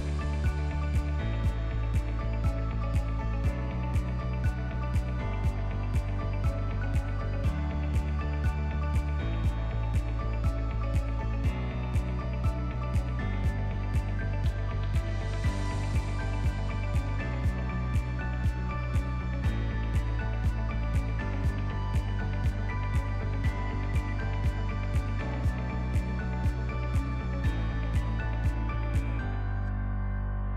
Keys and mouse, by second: 0.1-3.4 drag, 4.2 /, 5.9-6.4 middle drag, 6.6 Tab, 7.6 click, 8.0 middle click, 10.4 click, 11.2 KP_1, 13.5 click, 14.4 alt+z, 14.8 click, 16.3 middle click, 17.2 middle click, 17.6 alt+z, 17.9 middle click, 18.4 middle click, 19.4 2, 19.8 click, 20.4 u, 22.6 click, 23.4 middle click, 24.5 click, 25.2 ctrl+t, 26.0 click, 26.6 click, 28.4-29.7 middle drag.